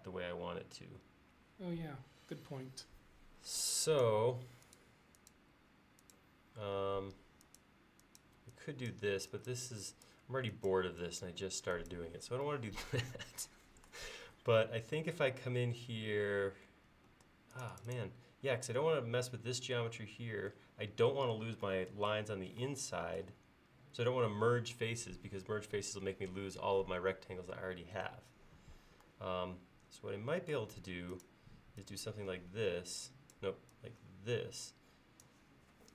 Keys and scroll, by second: 6.8 e, 17.1 space.